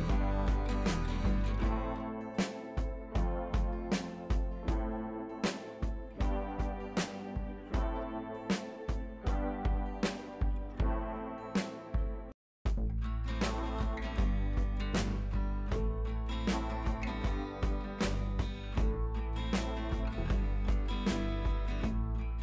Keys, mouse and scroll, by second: 0.3 ctrl+z, 1.3 scroll up 1, 2.1-3.3 drag, 9.6 right click, 10.1 click, 11.1 scroll down 1, 11.5 scroll up 1, 12.2 click, 18.2 scroll down 1, 18.8 scroll up 1, 20.0 scroll down 1, 20.3-20.9 scroll up 1, 20.9 click.